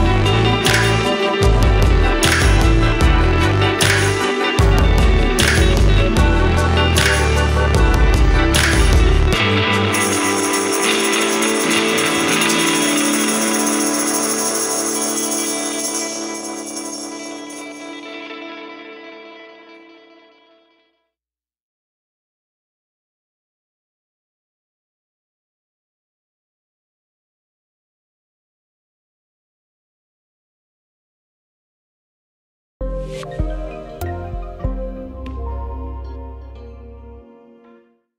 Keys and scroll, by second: 4.0 ctrl+z, 4.5 ctrl+c, 7.7 ctrl+g, 8.4 ctrl+v, 15.2 ctrl+a, 29.9 ctrl+Home.